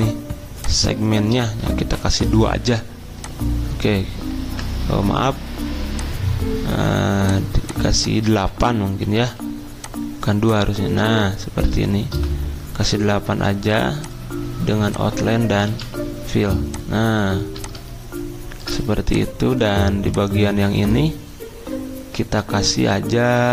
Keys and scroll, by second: 2.1 2, 4.4 ctrl+z, 9.3 8, 12.1-13.5 typing, 15.7 v.